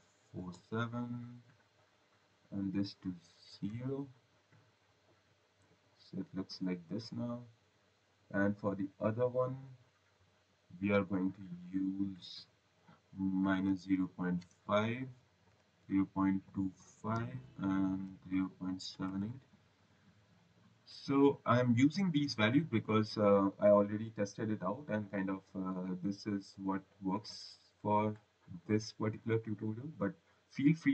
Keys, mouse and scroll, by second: 0.1-0.9 typing, 2.4 click, 3.6 typing, 4.9 click, 6.8 click, 7.3 scroll, 8.8 click, 11.9 click, 13.4-14.8 typing, 16.1-16.9 typing, 17.2 Tab, 18.0-19.5 typing, 20.3 click, 24.1 click, 29.3 click.